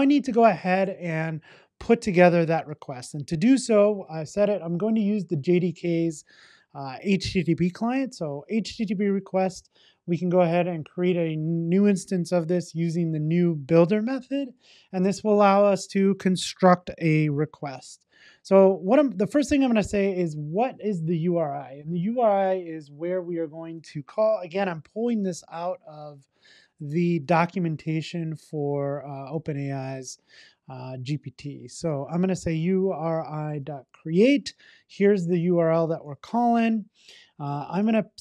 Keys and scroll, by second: 7.9 Return, 12.9 Return, 19.8 Return, 32.4 Return, 34.0 super+v.